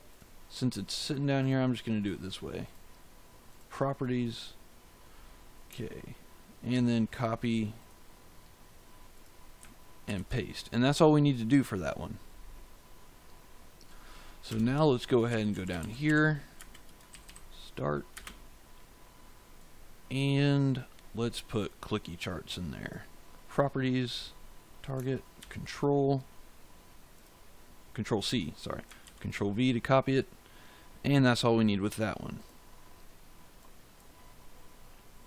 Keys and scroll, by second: 6.6 ctrl+c, 9.9 ctrl+v, 14.4 Return, 14.9-17.0 typing, 18.0 space, 25.3 ctrl+c, 29.0 ctrl+v.